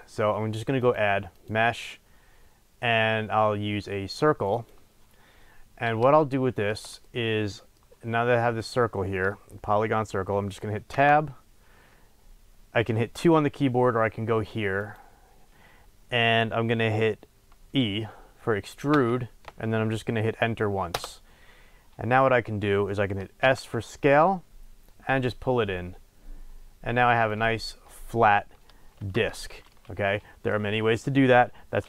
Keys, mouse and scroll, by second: 0.8-6.1 drag, 5.3-6.1 scroll up 2, 6.1-10.9 shift+middle drag, 10.9 Tab, 14.8 click, 18.8 e, 21.0 Return, 23.5 s, 27.4 click, 28.9 Tab, 29.6-31.8 middle drag.